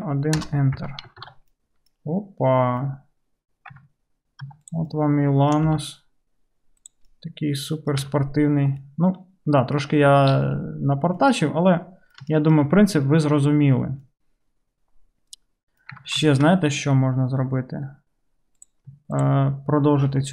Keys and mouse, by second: 0.8 Tab, 1.3 alt+z, 2.1-2.6 right drag, 2.6-4.6 drag, 3.8 Tab, 4.6 middle click, 4.8-7.3 drag, 5.7 g, 7.3 right click, 7.5 click, 7.8-9.9 drag, 8.1 Tab, 9.9-12.7 middle drag, 12.7 shift+right click, 13.3-16.5 middle drag, 16.0 Tab, 16.5-20.3 shift+right drag, 18.6 click, 18.6 middle click, 19.2 shift+click, 19.2 shift+middle click.